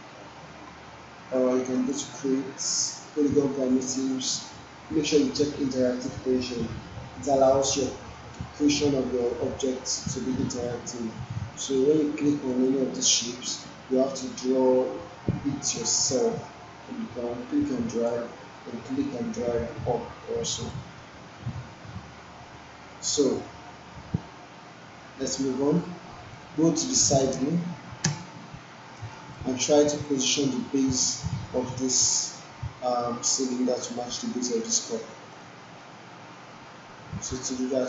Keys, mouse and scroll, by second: 0.3 Delete, 1.7 click, 9.1 click, 12.5-18.1 drag, 18.9-20.8 drag, 25.6 click, 25.8-26.4 alt+click, 27.4 space, 28.2 space, 29.0 alt+middle click, 29.4 alt+right click, 35.4-36.0 alt+middle drag.